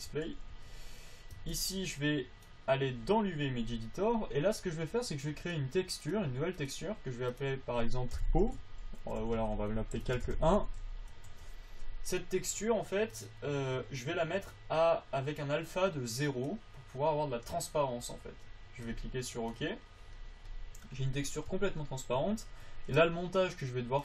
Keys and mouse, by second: 0.2 n, 0.8 t, 6.4-9.0 drag, 9.5 BackSpace, 9.7 BackSpace, 9.9 BackSpace, 21.8 Tab, 22.5 Tab, 23.9-24.0 drag.